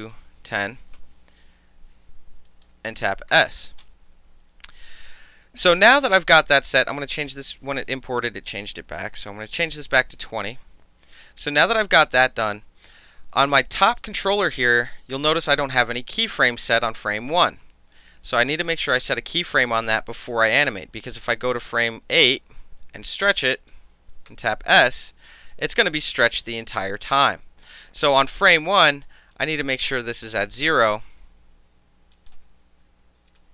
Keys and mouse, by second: 0.0 click, 0.6 KP_1, 0.7 KP_0, 1.0 KP_Enter, 3.3 s, 7.2 click, 8.5 KP_2, 8.6 KP_0, 9.2 KP_Enter, 13.9 click, 16.7 click, 19.0 s, 20.6 ctrl+z, 21.6-22.2 drag, 23.2-23.7 drag, 24.3 s, 25.5-27.8 drag, 27.8-29.3 middle drag, 29.3 click, 29.4-32.1 middle drag, 30.0 KP_0, 30.2 KP_Enter, 32.3 alt+middle click, 32.7 ctrl+z, 33.3 click.